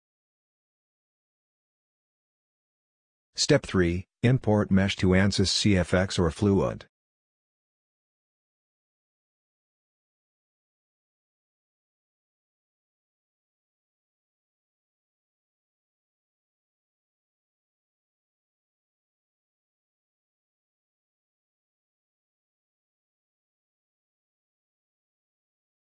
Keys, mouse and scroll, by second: 23.5-25.3 scroll up 1.